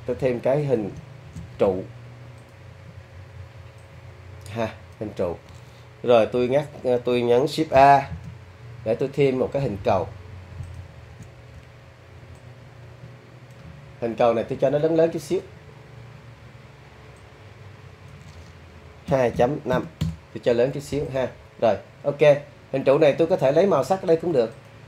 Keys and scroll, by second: 8.1 shift+a, 19.1 2, 19.3 ., 19.7 5, 20.0 Return.